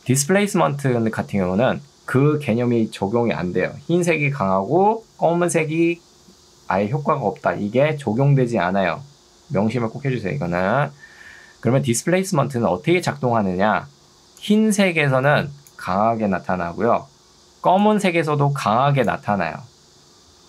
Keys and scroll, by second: 0.2 Escape, 14.0 ctrl+2.